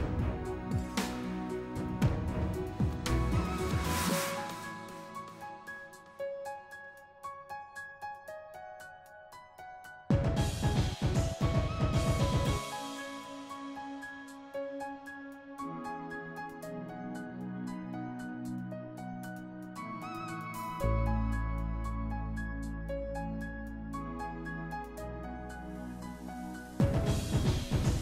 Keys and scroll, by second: 9.9-10.9 typing, 11.4 ctrl+c, 12.9 ctrl+v, 13.3 ctrl+v, 13.8 ctrl+v, 14.3 ctrl+v, 14.8 ctrl+v, 15.3 ctrl+v, 15.8 ctrl+z, 16.6 ctrl+v, 23.5-24.5 typing, 27.4-28.0 typing.